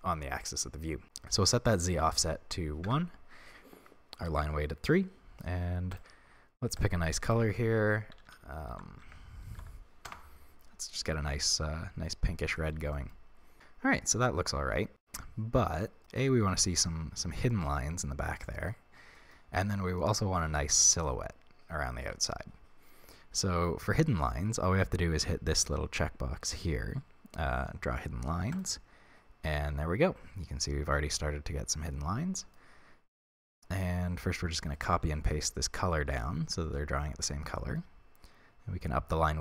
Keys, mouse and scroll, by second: 1.7-6.0 drag, 2.9 Return, 8.3 f, 11.5-28.5 middle drag, 12.3 scroll down 1, 13.3 scroll down 1, 28.5 click, 29.4-39.4 middle drag, 33.5-34.9 scroll down 2, 34.9 ctrl+c, 36.1 ctrl+v.